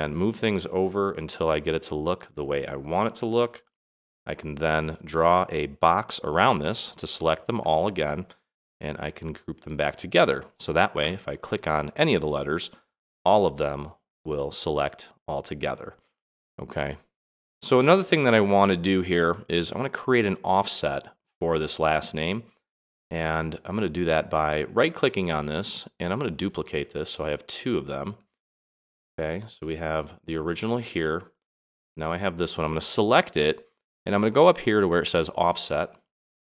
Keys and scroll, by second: 2.9 Right.